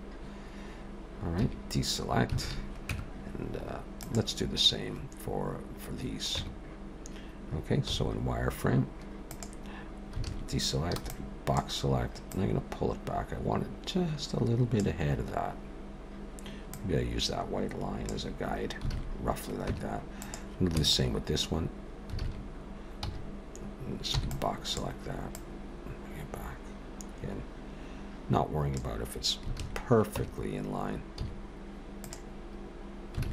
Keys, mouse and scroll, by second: 1.4 a, 2.4 alt+a, 2.9 Tab, 4.0 click, 6.4 Tab, 7.9 z, 10.3 alt+a, 10.9 b, 12.3 click, 15.7-16.6 scroll up 1, 16.7 click, 18.9 alt+a, 19.7 Tab, 20.2 click, 20.8 Tab, 22.2 alt+a, 22.9 v, 24.1 b, 25.3 click, 29.6 alt+a, 30.2 Tab, 31.2 z, 33.2 alt+a.